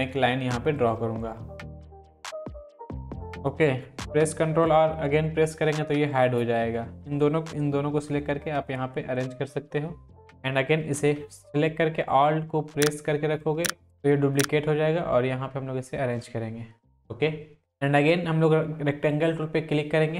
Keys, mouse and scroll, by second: 0.0 click, 0.8 click, 1.6 shift+click, 2.4 shift+click, 2.8 ctrl+;, 5.5 ctrl+r, 6.1 click, 6.8-7.4 drag, 7.8 Down, 9.1 Right, 13.4-14.1 alt+drag, 19.1-20.1 drag.